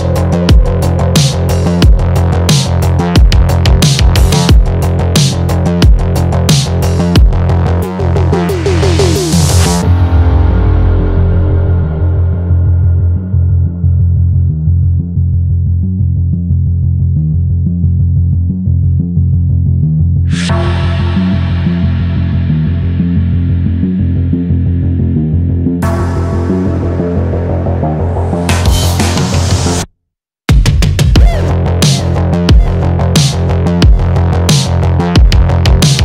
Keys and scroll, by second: 7.3 Return.